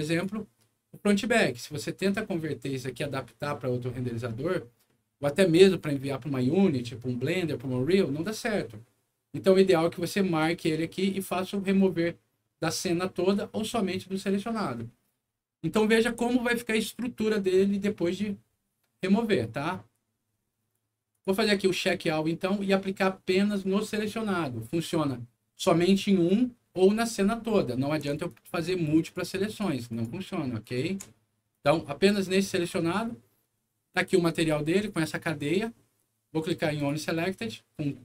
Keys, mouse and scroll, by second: 1.0 scroll down 1, 4.8 middle click, 5.4 scroll down 2, 15.2 scroll down 2, 15.9 scroll up 2, 16.2 middle click, 21.1 click, 21.7 click, 28.2 ctrl+click, 28.9 ctrl+click, 29.4 ctrl+click, 29.8 ctrl+click, 30.5 ctrl+click, 31.4 ctrl+click, 34.3 scroll down 1, 34.7 scroll up 1, 36.7 click.